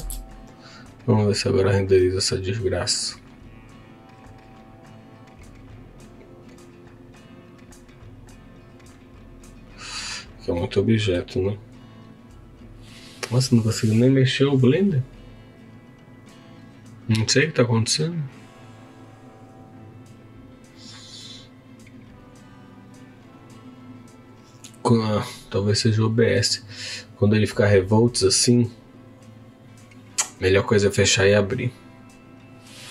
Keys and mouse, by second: 2.0-10.2 drag, 20.1-27.8 middle drag, 27.8-32.9 drag.